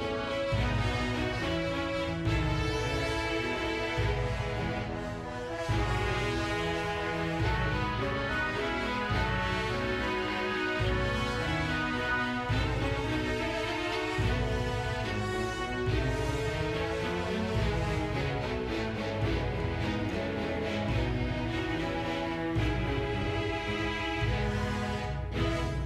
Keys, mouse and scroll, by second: 0.0 i, 0.7-2.5 right drag, 2.5 click, 4.1 i, 8.0 click, 8.2 scroll down 3, 8.4 middle click, 8.6 shift+middle click, 8.7 middle click, 9.1 shift+middle click, 9.3 middle click, 9.5 shift+middle click, 9.7-10.3 scroll up 7, 9.9 shift+middle click, 10.3 shift+middle click, 10.6 click, 11.2 click, 11.4 a, 11.9 middle click, 12.1 KP_Decimal, 12.3 scroll down 1, 12.4 shift+middle click, 12.5-13.1 shift+middle drag, 12.5 scroll up 1, 13.1 click, 13.4 g, 13.8 click, 13.9 middle drag, 14.4 r, 14.6 click, 14.7 middle click, 15.3 right click, 15.3 r, 15.4 g, 16.1-16.6 drag, 16.9 click, 17.4 click, 17.5 middle click, 17.9 right click, 18.0-20.8 typing, 18.6 click, 18.7 middle click, 19.1 click, 19.1 middle click, 19.9 click, 19.9 middle click, 20.2 click, 20.3 middle click, 21.5 click, 22.3 click, 23.4-25.8 drag.